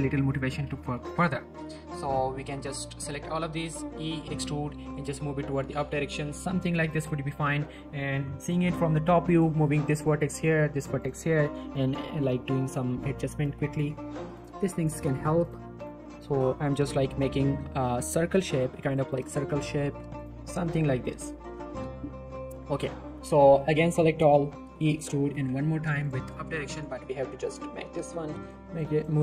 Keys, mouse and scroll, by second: 0.1 scroll up 1, 0.3 click, 0.5 Tab, 1.0 z, 1.2 shift+middle click, 1.4-2.0 shift+scroll up 1, 2.0-2.5 drag, 3.8 e, 6.8 click, 7.1 middle click, 7.4 z, 9.3 click, 9.5 g, 10.0 click, 10.5 g, 11.0 click, 11.2 shift+middle click, 11.7 click, 11.8 g, 12.2 click, 12.8 g, 13.4 click, 13.8 g, 14.3 click, 14.9 g, 15.4 click, 15.9 g, 16.1 click, 16.8 g, 17.1 click, 19.3 shift+g, 19.6 x, 20.2 click, 20.5-21.1 scroll down 2, 20.6 middle click, 20.8 Tab, 21.1 middle click, 21.2-21.8 scroll up 1, 22.5 Tab, 22.7 z, 23.4-23.9 click, 23.9 scroll up 1, 24.6 e, 25.3 z, 26.0 click, 27.0 g, 28.4 click.